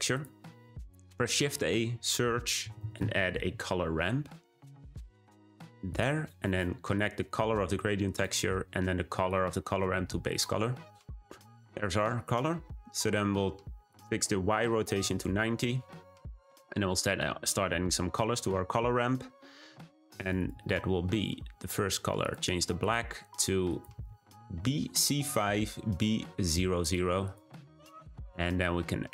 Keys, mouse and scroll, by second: 6.9-8.1 drag, 9.2-10.3 drag, 15.1-22.8 drag.